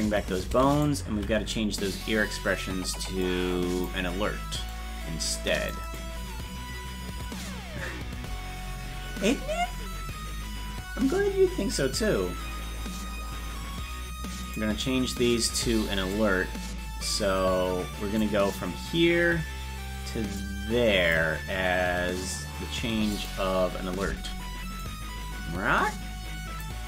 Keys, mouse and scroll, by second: 0.8 right click, 1.1 c, 13.8 scroll down 1, 14.4 click, 16.1-18.2 drag, 20.4 click, 23.1 click, 24.8-26.6 drag.